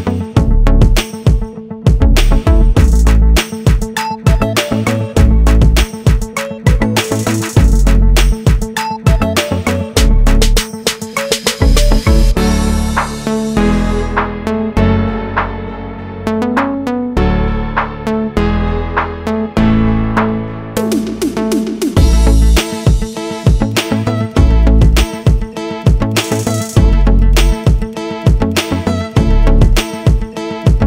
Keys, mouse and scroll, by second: 0.0 scroll up 1, 0.5 scroll down 1, 2.6 click, 4.0 double click, 5.6 click, 10.5 click, 15.2 double click, 15.7 scroll up 1, 16.7 scroll down 1, 17.4 click, 17.7 double click, 20.5 click, 21.3 scroll down 1, 24.5 scroll down 1, 28.0 click.